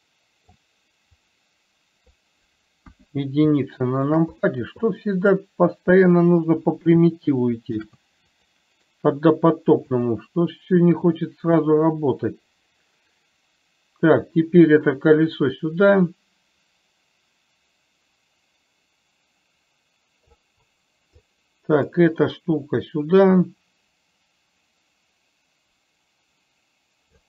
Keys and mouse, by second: 1.7 click, 3.2 KP_1, 3.9 shift+middle click, 4.7 click, 5.2-6.5 drag, 8.0 shift+d, 11.9-20.8 drag, 21.5 click, 23.2-27.2 drag.